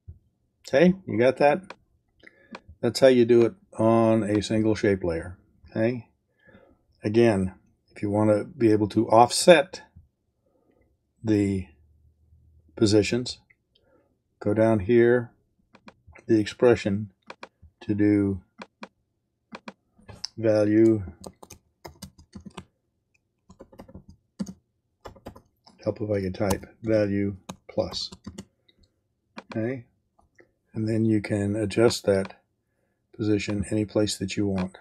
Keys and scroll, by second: 20.8-22.5 typing, 23.5 shift+BackSpace, 24.3 space, 25.0 BackSpace, 26.5 e, 26.8 space, 27.9 shift+=, 29.0 space.